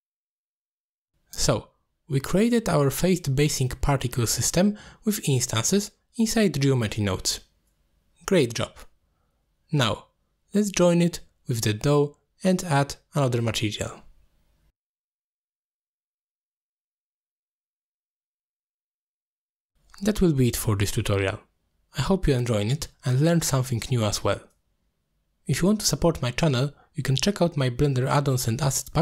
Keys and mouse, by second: 0.3 middle drag, 0.8 shift+middle drag, 1.2 middle drag, 2.0-2.8 middle drag, 3.1-3.6 middle drag, 4.2-6.9 middle drag, 7.8 ctrl+space, 9.6 ctrl+click, 9.9 click, 10.1 middle click, 10.5 g, 10.6 click, 11.2-11.7 drag, 12.3 middle click, 12.5 click, 12.7 g, 14.3 middle click, 14.8-16.1 drag, 16.6 middle click, 16.9 middle click, 17.7 shift+a, 21.9 click, 23.4 click, 23.5-25.4 shift+drag, 26.5 click, 27.6 click.